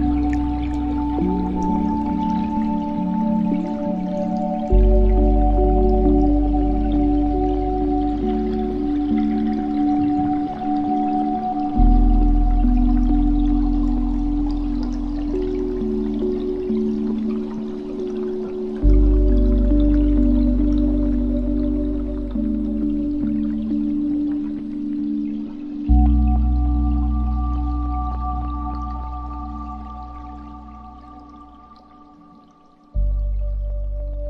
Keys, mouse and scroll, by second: 1.5-2.2 scroll down 3, 2.2-3.4 drag, 3.4 KP_0, 5.0-5.8 scroll down 4, 5.8-7.6 drag, 8.2-9.1 scroll down 2, 9.4-12.4 drag, 12.8 scroll down 3, 13.0 scroll up 2, 13.0-14.1 scroll down 5, 14.5-16.0 drag, 16.0 space, 19.9 KP_0, 20.9 scroll up 5, 21.7 space, 22.8 click, 23.2-23.8 scroll down 3, 23.8 shift+a, 26.7 g, 29.0-30.6 right drag, 30.6 shift+d, 32.6-33.0 scroll up 6, 33.8 click.